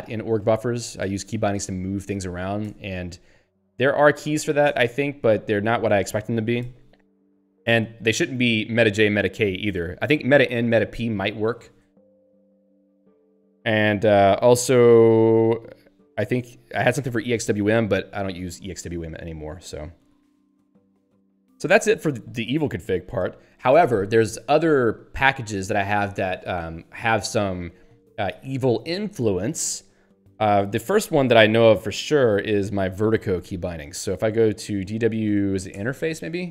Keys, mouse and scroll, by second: 0.0-2.0 typing, 4.7 Return, 6.1 Down, 7.5 Up, 8.0 Right, 9.6 Down, 10.6 Up, 11.6 Down, 13.5 Up, 14.8 Left, 16.4 Up, 16.9 Left, 17.1 Up, 17.5 Left, 18.1 Down, 22.6 Page_Up, 29.9 click, 30.8 ctrl+f, 34.5-35.9 typing.